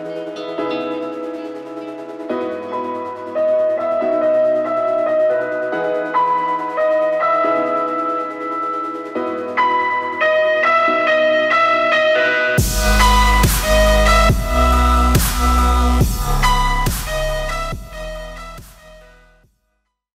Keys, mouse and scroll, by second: 3.6 shift+click, 5.3 click.